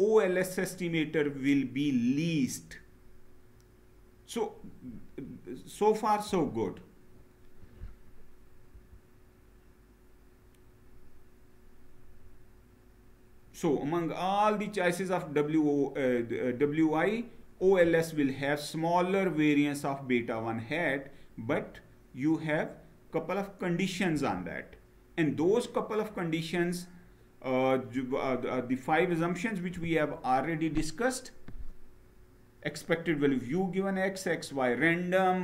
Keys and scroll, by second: 6.0 Down, 23.9 Down.